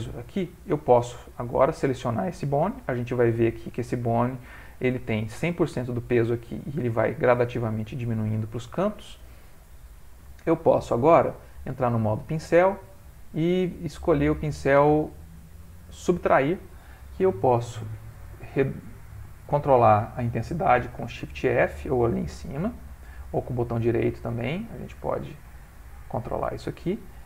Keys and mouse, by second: 11.4 click, 13.0 click, 21.1 shift+f, 23.3 right click.